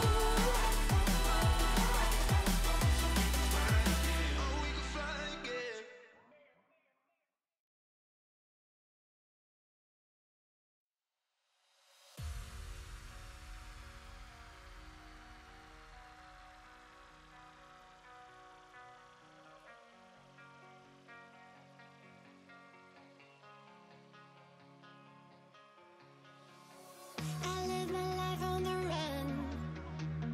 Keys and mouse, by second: 0.0 Return, 0.5 click, 6.9 click, 7.3 click, 7.8 click, 8.7 click, 9.3 click, 11.0 click, 14.3 click, 15.8 click, 16.3 click, 17.4 click, 18.7 ctrl+click, 22.1 shift+Up, 23.5 shift+Down, 24.1 shift+Up, 25.8 alt+shift+click, 26.7 alt+shift+click, 27.5 shift+Up, 27.7 shift+Down, 28.5 click.